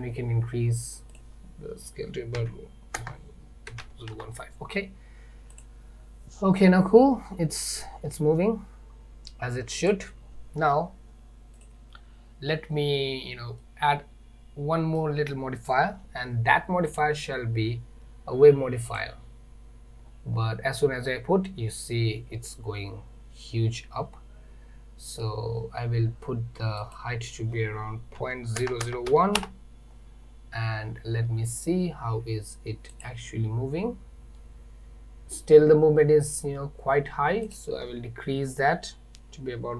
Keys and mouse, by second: 1.2-4.6 drag, 5.6 click, 9.9 click, 13.7-15.0 middle drag, 17.0-19.0 drag, 26.9-29.9 drag, 28.9 KP_0, 37.5-39.7 drag.